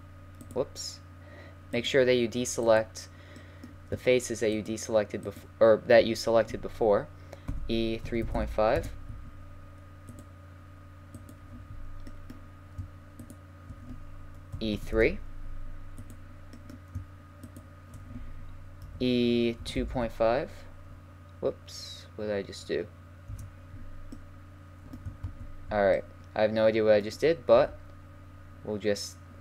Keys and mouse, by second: 0.3-1.4 middle drag, 2.7-4.4 right drag, 4.4 middle click, 5.4-7.3 right drag, 7.5 e, 11.2-15.1 right drag, 14.5 e, 16.0-18.2 middle drag, 18.2 right click, 18.8 3, 19.6 2, 19.8 ., 19.9 5, 23.3 Return, 24.1-26.7 middle drag, 25.2 ctrl+z, 27.6 e.